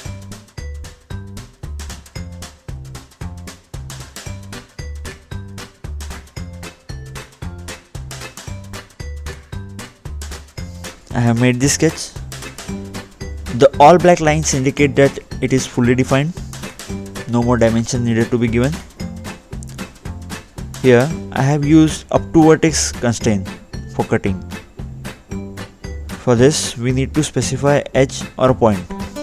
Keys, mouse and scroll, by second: 1.3 click, 2.3 ctrl+8, 3.8 ctrl+8, 3.9 click, 5.1 ctrl+8, 6.0 click, 7.7 ctrl+5, 10.0 ctrl+3, 10.8 ctrl+4, 12.2 click, 12.7-13.1 scroll down 2, 13.1-13.5 scroll up 2, 13.5 scroll down 2, 14.8-15.5 scroll up 2, 15.5 scroll up 1, 15.6 middle click, 18.1-18.8 scroll up 2, 18.9 middle click, 19.7 scroll up 1, 20.2 scroll up 1, 20.4-20.9 scroll down 2, 21.0 middle click, 22.2 scroll down 2, 23.7 middle click, 25.4 click, 28.7 click.